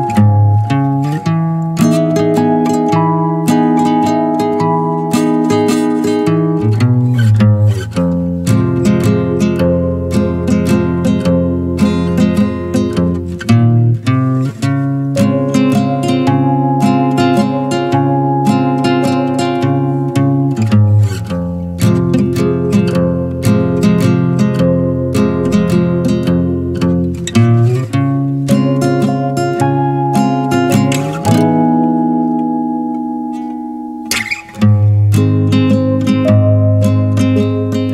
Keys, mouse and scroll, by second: 0.0 click, 0.3-1.0 middle drag, 1.0 shift+click, 1.4 shift+click, 1.8 shift+click, 2.2-3.2 middle drag, 3.2 e, 3.6 alt+s, 5.6 scroll down 1, 5.8-6.6 middle drag, 6.6 scroll down 1, 6.8 middle click, 7.0-9.1 middle drag, 9.1 click, 9.6 shift+click, 9.9-10.4 middle drag, 10.4 shift+click, 10.8-11.9 middle drag, 11.9 e, 12.4 alt+s, 14.1 scroll down 2, 14.4 Tab, 14.5-16.9 middle drag, 16.9 scroll up 2, 17.2 middle click, 17.5 Tab, 18.3 2, 18.4 click, 19.3 middle click, 20.1 click, 20.5 scroll up 2, 20.7-21.8 middle drag, 21.8 alt+shift+click, 22.5 click, 22.9 alt+shift+drag, 23.6 alt+shift+click, 24.5 ctrl+b, 27.7-28.0 scroll down 1, 28.0-29.2 middle drag, 29.2 scroll up 1, 29.4 Tab, 30.0 click, 30.5 alt+shift+click, 31.7 ctrl+b, 34.3 Tab, 34.5 scroll down 2, 34.7-37.9 middle drag.